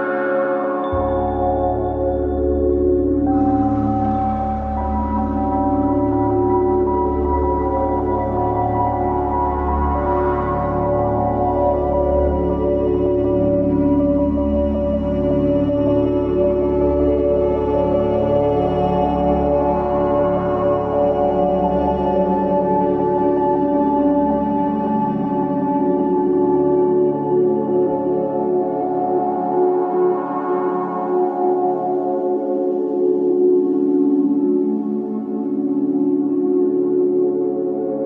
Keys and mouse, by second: 5.6 click, 7.8 Tab, 11.6 click, 12.1 click, 13.0-14.0 drag, 14.3-15.4 shift+middle drag, 17.2 alt+shift+click, 22.2 click, 23.4-26.8 drag, 27.7 Escape, 28.8 click, 33.4 alt+shift+click, 34.2 Escape, 34.8 click.